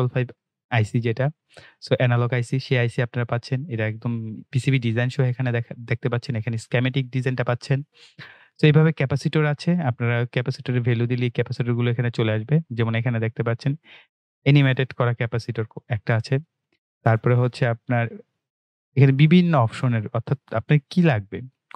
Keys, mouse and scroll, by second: 8.9 click, 14.0 click, 18.3 click, 19.3-21.1 scroll down 1.